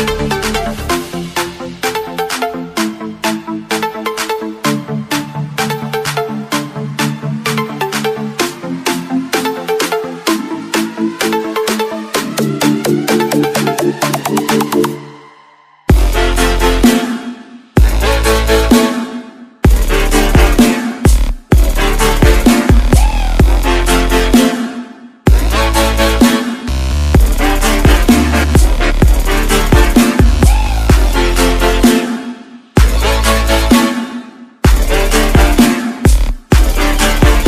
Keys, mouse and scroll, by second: 0.2 scroll up 1, 0.6 click, 1.6 Return, 2.6 right click, 6.7 click, 9.2 ctrl+t, 10.2 click, 15.4 Return, 17.2 click, 21.7 ctrl+shift+a, 28.6 click, 33.7 click.